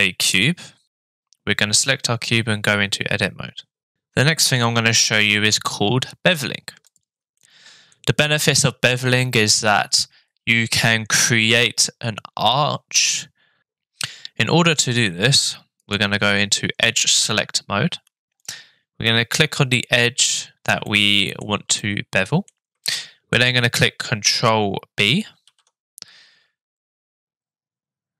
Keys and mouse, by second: 6.9 click, 7.4 middle click, 15.8 click, 19.1-20.4 middle drag, 20.9 shift+middle click, 21.8 middle click, 22.8 shift+middle click, 25.5 ctrl+b.